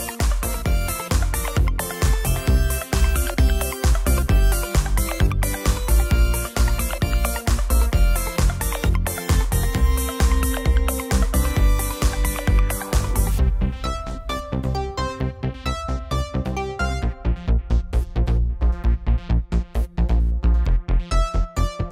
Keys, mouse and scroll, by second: 21.6-21.9 middle drag.